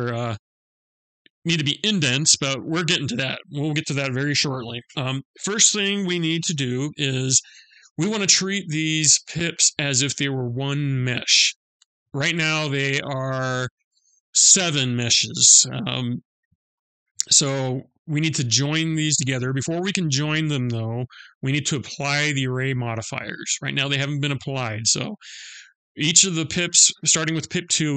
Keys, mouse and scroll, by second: 11.7 middle click, 14.9 middle click, 22.3 middle click, 25.5 middle click.